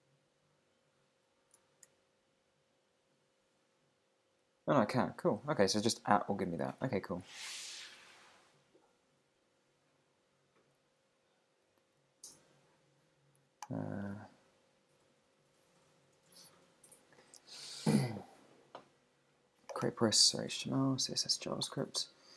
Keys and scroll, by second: 1.7 shift+2, 3.1 Down, 5.9 Down, 6.5 Up, 9.2 Down, 10.7 Up, 11.1 Down.